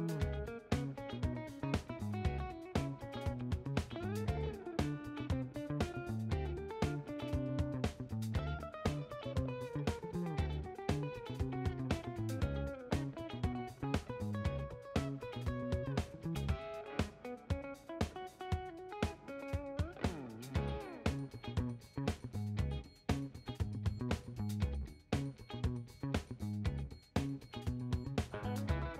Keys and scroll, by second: 4.5 Left, 5.0 shift+Right, 5.6-12.2 typing, 27.1-27.9 typing.